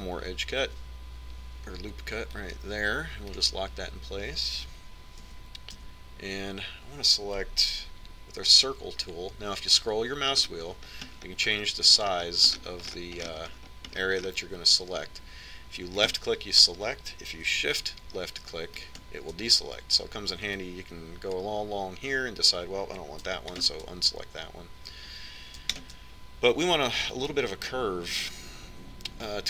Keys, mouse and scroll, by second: 1.0 ctrl+r, 6.4 a, 6.9 z, 9.5 c.